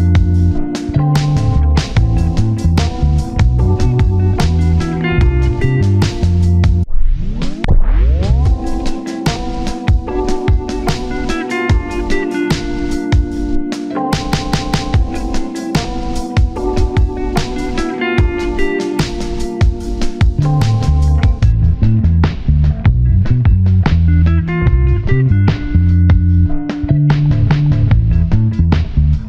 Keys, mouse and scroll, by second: 0.7 scroll down 1, 1.3 scroll up 1, 1.8 ctrl+click, 2.4 shift+middle click, 2.6 scroll up 1, 2.8-3.3 scroll down 1, 4.7 scroll up 1, 5.1 ctrl+click, 8.9 scroll down 1, 9.3 shift+middle click, 9.5-10.0 scroll up 2, 9.6 shift+middle click, 10.3 ctrl+click, 12.0 scroll down 1, 13.4 scroll down 1, 13.4 shift+middle click, 14.3 scroll up 1, 14.8 ctrl+click, 17.1-18.1 scroll down 2, 17.4 1, 18.1 double click, 20.3 scroll up 1, 21.4 alt+z, 22.3 alt+z, 24.4 double click, 24.8 scroll down 1, 25.0 scroll up 1, 25.3 alt+z, 25.5 alt+z, 26.6 scroll down 1, 26.8 shift+middle click, 27.2 double click, 27.4 scroll down 1, 27.7-28.1 typing.